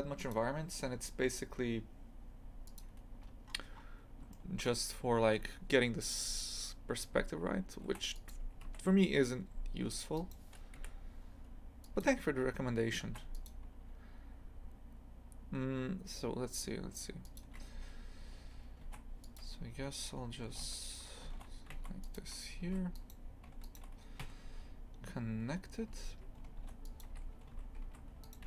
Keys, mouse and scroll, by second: 2.6 click, 3.1-3.4 scroll down 1, 3.4-4.3 scroll up 5, 4.4-7.0 middle drag, 7.0 2, 7.8 ctrl+r, 9.8 3, 10.1 right click, 10.7 Delete, 13.0 ctrl+r, 17.7 2, 18.8 ctrl+r, 20.5 g, 22.6 2, 22.9 right click, 23.6 right click, 24.2 f, 25.9 2, 26.5 ctrl+r, 27.4 a, 27.8 1, 28.2 right click.